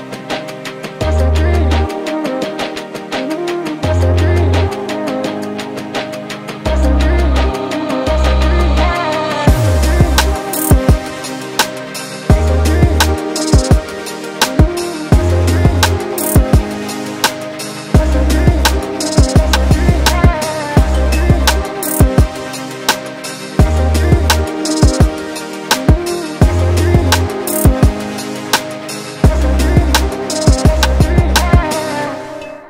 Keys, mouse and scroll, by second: 0.1 ctrl+z, 0.5 middle click, 0.9 scroll down 4, 1.1 Tab, 2.0 shift+z, 2.1-2.4 scroll down 2, 3.0 ctrl+z, 3.1 middle click, 3.9 KP_7, 4.4-6.1 scroll up 11, 4.9 shift+middle click, 6.5 shift+right click, 6.7-8.5 scroll up 9, 7.2 shift+middle click, 7.8 shift+middle click, 8.5 shift+middle click, 9.0 shift+right click, 9.2-9.6 scroll up 3, 9.6 shift+middle click, 10.5 shift+right click, 10.6-11.7 scroll up 5, 11.7 shift+right click, 13.3 scroll down 4, 14.4-14.9 scroll down 46, 14.8 middle click, 15.8 click, 17.4-18.1 scroll down 1, 18.1 middle click, 18.1 scroll down 5, 19.0 middle click, 19.4 scroll up 2, 19.6 middle click, 23.5 scroll down 2, 23.7 middle click, 25.0 Tab, 25.2 middle click, 25.9 click, 26.7 ctrl+click, 27.1 alt+click, 28.0 ctrl+click, 28.7 shift+z, 28.9 middle click, 30.4 ctrl+click, 31.1 ctrl+z, 31.6 ctrl+click, 32.1 ctrl+z, 32.3 ctrl+z.